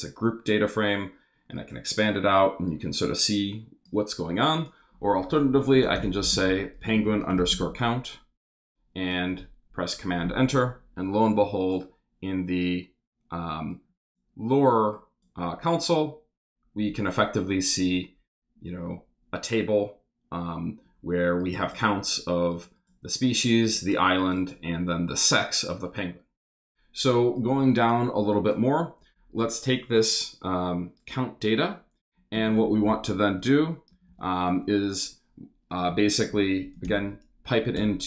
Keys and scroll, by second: 5.3-8.1 typing, 8.5 Return, 9.0 super+Return, 32.0-34.5 typing, 35.8 shift+\, 36.3 shift+BackSpace, 36.8 shift+super+m, 37.8 shift+super+Return.